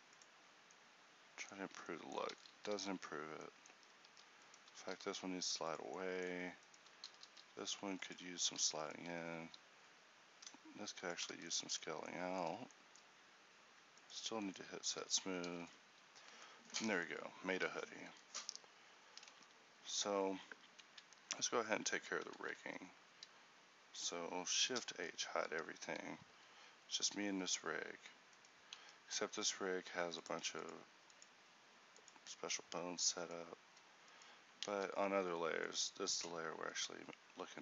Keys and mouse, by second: 0.9 middle click, 1.7 Tab, 2.4 ctrl+z, 3.8 Tab, 4.2 Tab, 5.0 g, 9.6 alt+s, 11.4 Tab, 14.6 click, 15.5 a, 17.8 ctrl+t, 25.4 a, 26.4 shift+t, 28.8 ctrl+t, 34.8 ctrl+t.